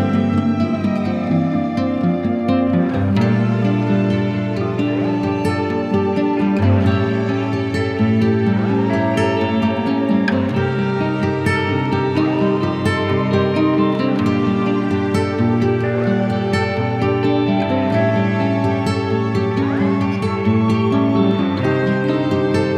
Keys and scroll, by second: 0.2 Return, 4.6 shift+F2, 11.1 5, 11.4 Return, 14.3 Escape, 15.1 F3, 15.4 Escape, 16.1 Delete, 21.8 c, 22.4 Escape.